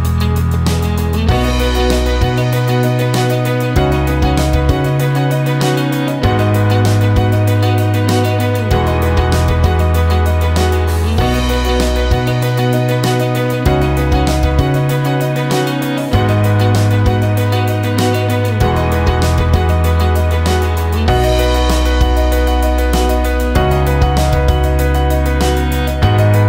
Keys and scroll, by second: 0.7 BackSpace, 1.7 d, 2.1 space, 17.9 shift+=, 20.2 -, 22.2-25.2 typing.